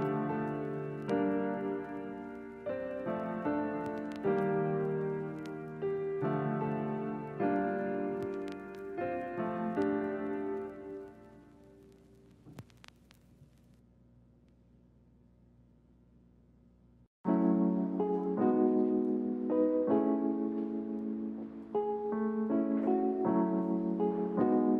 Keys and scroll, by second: 5.1 x, 9.1 Delete, 13.5 z, 14.8 Delete, 16.0 a, 20.4 z.